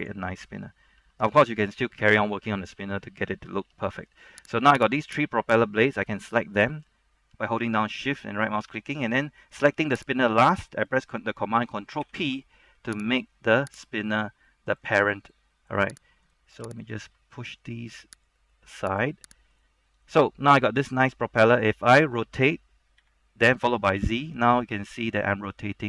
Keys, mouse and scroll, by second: 1.1 `, 1.9 scroll down 1, 2.1 middle click, 3.8 Tab, 4.2-4.6 scroll down 1, 4.6 middle click, 4.7 right click, 5.1 shift+right click, 6.1 middle click, 10.4 shift+right click, 12.1 ctrl+p, 13.1 click, 13.9 right click, 14.1-14.6 scroll down 1, 14.6 middle click, 16.4 right click, 17.0 shift+right click, 18.4 click, 19.6 right click, 20.0 scroll up 1, 20.3 middle click, 23.1-24.1 typing.